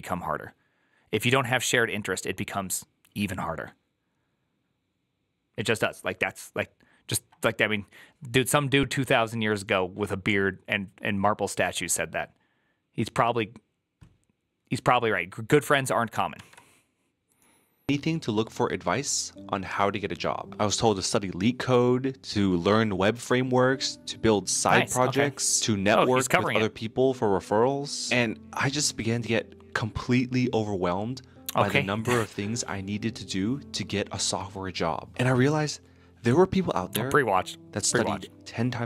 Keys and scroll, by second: 16.3 alt++.